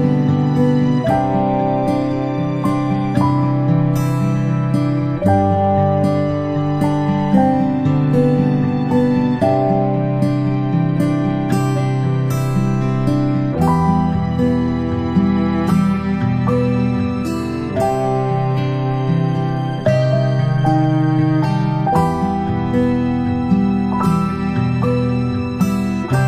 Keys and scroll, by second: 0.6-1.3 space, 6.3 space, 6.8 space, 6.9 space, 6.9 space, 8.2 space, 8.7 space, 8.9 space, 18.1 ctrl+z, 18.5 ctrl+z.